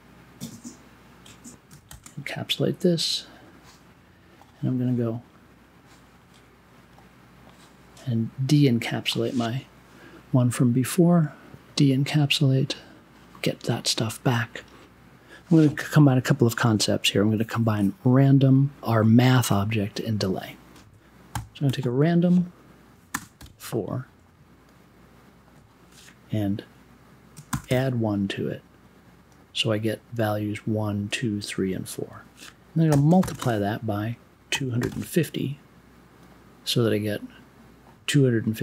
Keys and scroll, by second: 1.8 shift+super+e, 21.3 n, 21.6 r, 23.1 space, 23.3 4, 27.5 shift+=, 27.6 space, 27.8 1, 32.9 n, 33.2 shift+8, 33.3 space, 34.5 2.